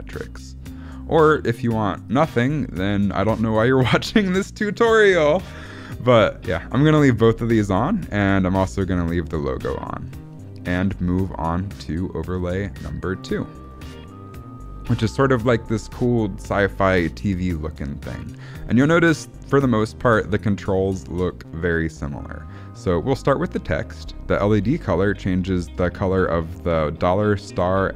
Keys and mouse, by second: 2.0 click, 6.4 click, 6.9 click, 8.5 click, 12.3 click, 13.1 click, 13.6 click, 20.0 alt+a.